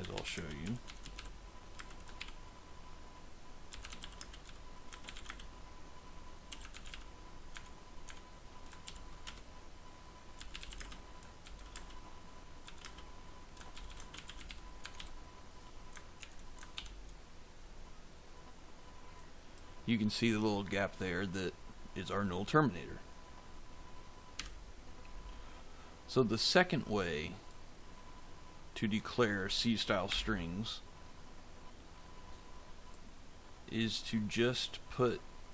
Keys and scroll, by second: 0.0-2.1 typing, 3.3-7.3 typing, 7.4 Tab, 8.7 shift+[, 9.2 Return, 10.0-15.4 typing, 16.1 ctrl+s, 16.6 ctrl+F5, 24.3 f, 30.0 BackSpace.